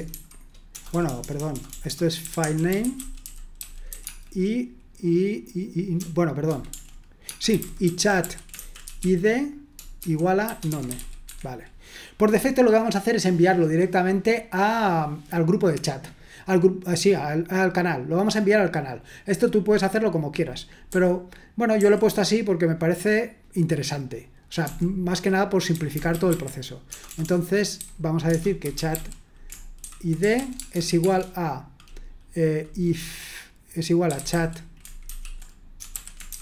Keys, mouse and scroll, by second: 0.0-4.7 typing, 5.9 BackSpace, 7.2-11.5 typing, 20.9-21.7 typing, 24.6-31.3 typing, 33.8-36.4 typing.